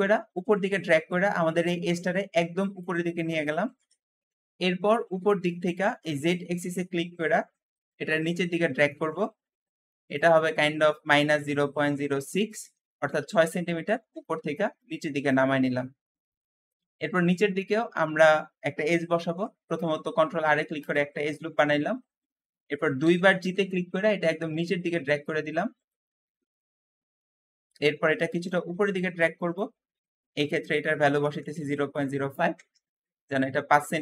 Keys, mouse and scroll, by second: 3.9 Escape, 4.6-5.5 scroll up 1, 5.5-5.9 scroll up 1, 5.9 click, 8.5-10.0 middle drag, 10.0-13.2 drag, 10.9-12.2 typing, 12.5 Return, 12.5 Return, 16.5 shift+Escape, 16.5-17.6 shift+middle drag, 17.6-17.9 scroll up 1, 17.9 shift+middle click, 18.4-19.0 scroll up 1, 19.0 ctrl+r, 22.0 shift+middle click, 22.9 g, 23.0 g, 23.4 g, 26.3 middle click, 26.8-28.4 scroll up 2, 28.4 click, 30.5-33.7 drag, 31.1-32.7 typing, 33.7-34.0 scroll down 1.